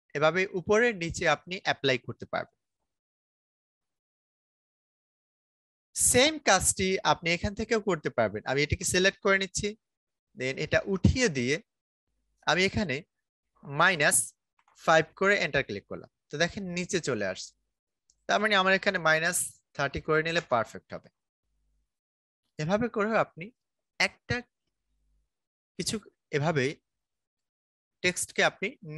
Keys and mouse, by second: 4.9-13.7 drag, 13.7 -, 15.3 Return, 17.7 click, 18.9 -, 20.3 Return, 21.7 click, 26.9 click.